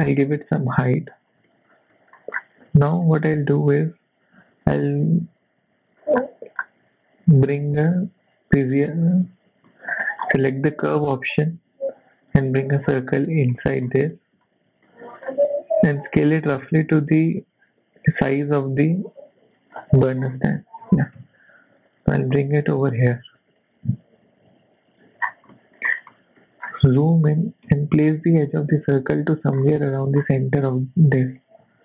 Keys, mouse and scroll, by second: 0.0 scroll down 3, 0.0 g, 0.0 z, 0.6 KP_7, 1.0 scroll down 3, 1.5 shift+middle click, 2.0 shift+middle click, 2.3-2.7 scroll up 2, 2.9 shift+a, 9.7 shift+middle click, 9.9-10.3 shift+scroll down 4, 10.3 shift+middle click, 10.9 s, 13.0 s, 13.5-14.7 scroll up 5, 13.5 z, 13.6 shift+middle click, 14.1 shift+middle click, 14.9 shift+middle click, 15.3 scroll up 1, 15.8 s, 19.8-20.4 scroll down 6, 20.3 shift+middle click, 20.8 g, 22.1 scroll down 2, 22.3 shift+middle click, 23.5 g, 25.2-26.1 scroll up 9, 25.5 shift+middle click, 26.1 shift+middle click, 26.6-27.3 scroll up 2, 27.3 g, 29.6-30.3 scroll up 5, 29.7 shift+middle click, 31.3 g.